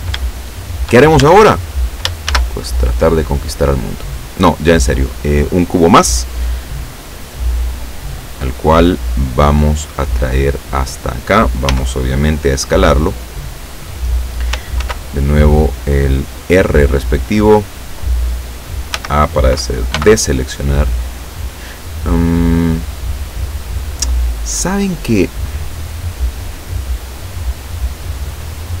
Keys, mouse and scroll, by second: 0.4 shift+scroll up 2, 1.3 shift+a, 2.4 shift+a, 3.8 click, 7.6-11.2 drag, 11.8 s, 13.8 click, 14.9 ctrl+r, 16.6 click, 17.6 click, 19.0 a, 20.0 b.